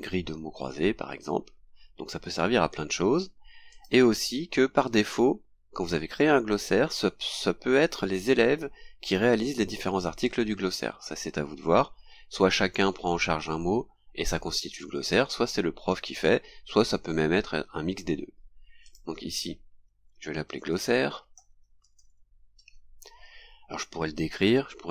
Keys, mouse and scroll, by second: 3.7 click, 18.8 click, 20.3-22.6 typing, 23.0 scroll down 2.